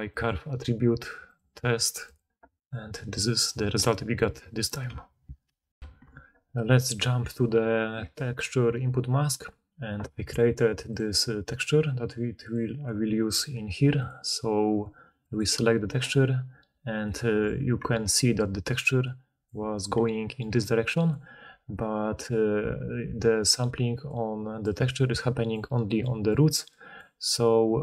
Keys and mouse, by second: 5.8 ctrl+alt+Insert, 5.8-7.2 ctrl+alt+middle drag, 7.2-10.8 drag, 12.3 click, 12.5-14.0 middle drag, 14.0-27.8 drag, 18.4-19.6 d, 19.9 d, 20.2 d, 20.3-21.2 d, 23.0-27.6 d.